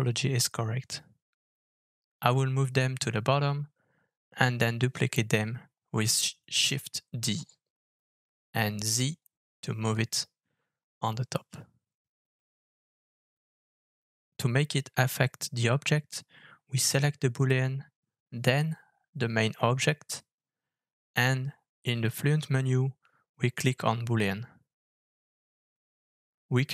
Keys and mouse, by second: 0.9 Tab, 2.4 alt+f, 4.2 g, 6.6 middle drag, 7.2-9.0 middle drag, 9.5 KP_7, 10.0 KP_1, 11.1 shift+d, 13.9 middle click, 14.4 shift+middle drag, 15.0 ctrl+z, 15.3 ctrl+z, 16.1 middle click, 18.1 shift+click, 19.7 alt+f, 25.7-26.7 middle drag.